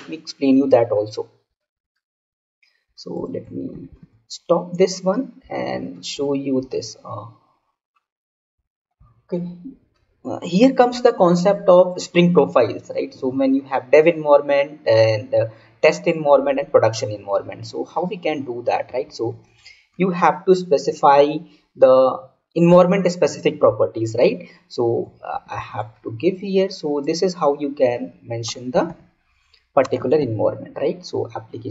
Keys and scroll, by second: 3.6 ctrl+c, 25.3 ctrl+c, 25.5 ctrl+v.